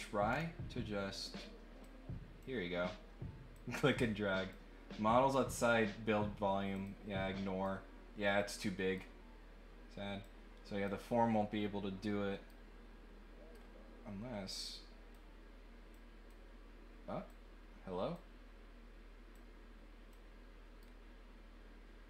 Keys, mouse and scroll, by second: 0.2 middle click, 0.2 scroll down 1, 1.8 click, 3.5-4.5 drag, 6.7 click, 7.7-8.8 right drag, 10.2 click, 12.4-13.5 right drag, 14.5 click, 15.9 click, 17.2 click, 19.3 click, 20.8-22.0 right drag.